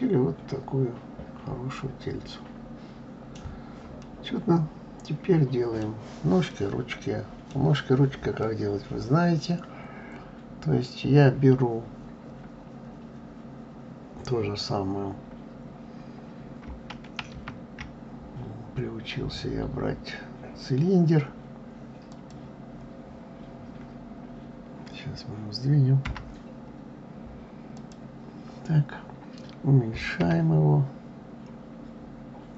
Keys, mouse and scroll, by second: 3.8-7.6 middle drag, 7.6-8.2 scroll down 2, 8.2-11.2 middle drag, 17.1 shift+a.